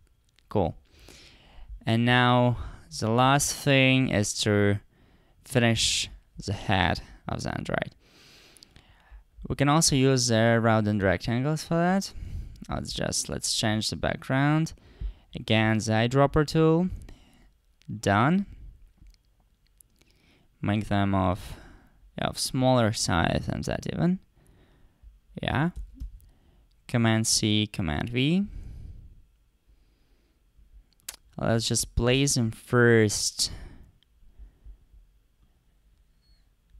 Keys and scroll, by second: 25.8 super+c, 26.0 super+v.